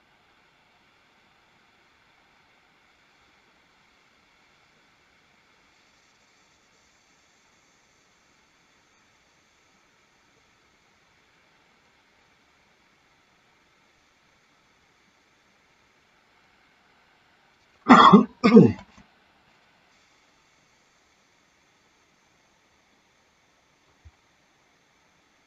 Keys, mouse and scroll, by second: 18.8 space, 22.8 middle click.